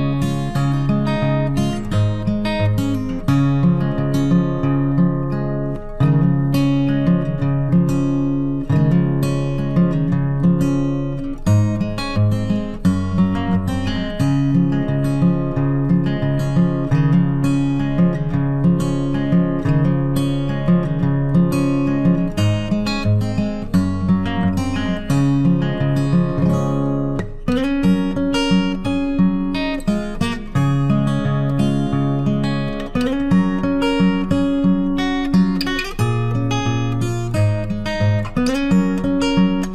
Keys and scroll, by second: 0.6 ctrl+t, 13.0 ctrl+t.